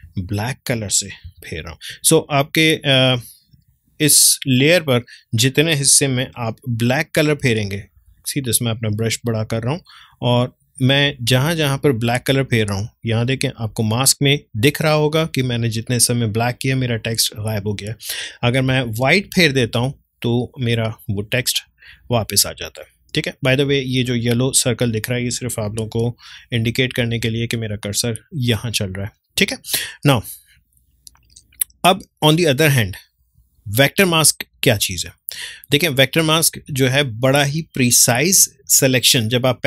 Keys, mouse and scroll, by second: 0.0 d, 1.2 x, 1.7-6.3 drag, 6.3-8.1 typing, 8.7-18.7 drag, 18.7 x, 19.1-21.9 drag, 25.8-27.7 typing, 32.2-36.9 drag.